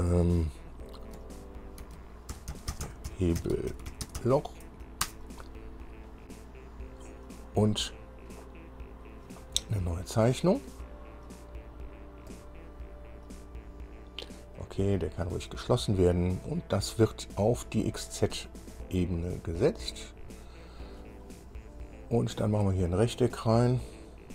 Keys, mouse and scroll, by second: 2.6-5.0 typing, 5.3 Return, 12.5 click, 14.8 click, 19.0 click, 20.1 click, 23.2 click.